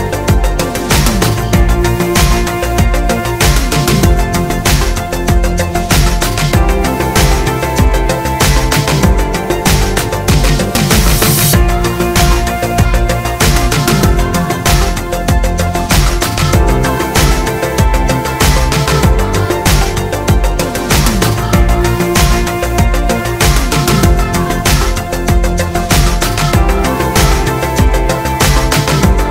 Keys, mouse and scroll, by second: 0.1 g, 1.1 click, 1.2 g, 3.0 r, 3.8 click, 4.0-9.5 middle drag, 9.5 click, 9.9 Tab, 11.5 click, 12.7 shift+click, 13.3 ctrl+KP_Add, 14.1 p, 15.0 click, 15.3-19.3 middle drag, 16.1 g, 17.0 shift+Tab, 17.4 g, 18.9 scroll down 1, 19.3 click, 20.0 alt+d, 21.2-22.6 middle drag, 22.3 g, 22.6 click, 22.7-24.3 middle drag, 23.2 shift+Tab, 23.6 g, 25.7 middle click, 25.7 r, 26.5 click, 26.6 g, 27.3 click, 27.9 Tab.